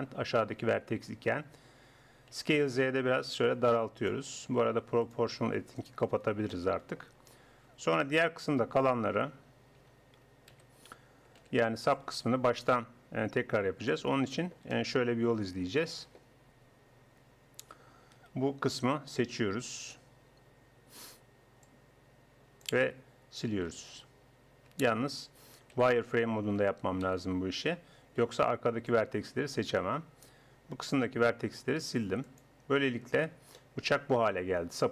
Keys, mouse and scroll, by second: 2.4 s, 5.5-6.5 drag, 6.5 middle click, 9.2 a, 9.8 a, 10.5 a, 11.4 b, 14.6-18.2 drag, 18.2 KP_1, 21.0 b, 23.7 x, 25.8 z, 27.2 a, 28.2 b, 31.8 x, 33.2 z.